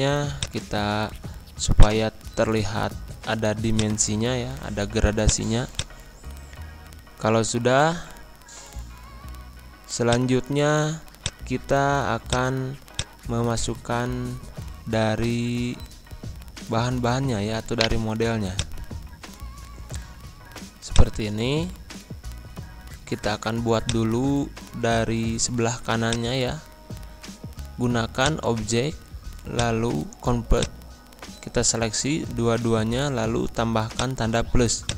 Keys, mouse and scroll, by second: 6.1 scroll down 1, 6.9 scroll up 1, 8.3 Pause, 10.0 click, 13.6 ctrl+z, 14.9 ctrl+c, 15.5 ctrl+v, 17.7 right click, 18.5 click, 20.9-23.4 drag, 23.4 z, 23.8-33.8 drag, 33.9-34.9 drag.